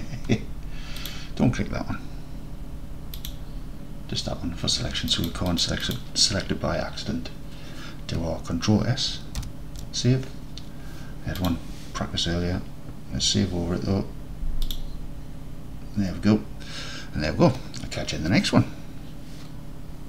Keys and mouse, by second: 1.1 click, 3.2 click, 5.3 click, 9.6 ctrl+s.